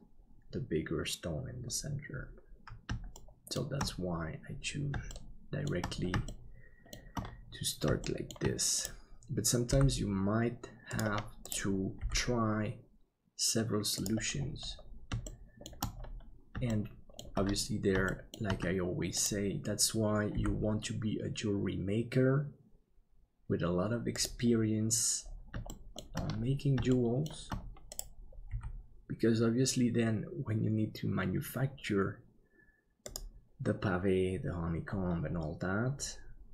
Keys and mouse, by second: 3.2 shift+middle click, 5.1 shift+middle click, 6.3 shift+middle click, 8.0 shift+middle click, 9.6 g, 12.0 g, 15.3 shift+middle click, 16.8 shift+middle click, 18.1 shift+middle click, 20.3 g, 25.7 shift+middle click, 26.9 shift+middle click, 28.5 g.